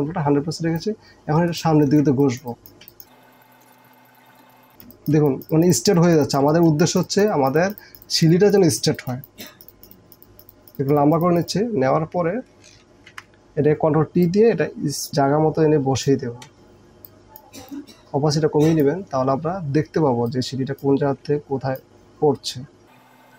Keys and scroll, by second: 2.9 space, 13.1 ctrl+t.